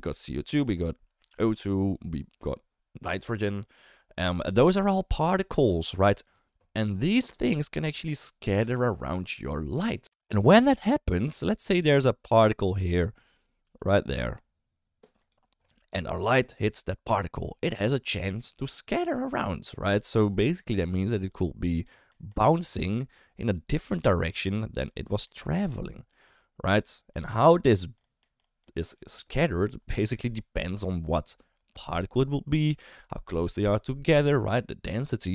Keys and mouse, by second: 12.1 click, 12.1-13.6 typing, 12.5 click, 13.3 click, 13.7-15.3 drag, 15.2 d, 15.3 d, 18.3 d, 19.9-21.1 d, 21.2-22.5 drag, 22.5 d, 22.5 d, 22.6 d, 22.8 d, 23.0 click, 24.1 d, 24.4-25.5 drag, 25.7 d, 26.0-27.1 drag, 27.1 d, 27.2 d, 27.4 d, 27.6-28.9 drag, 28.9 d.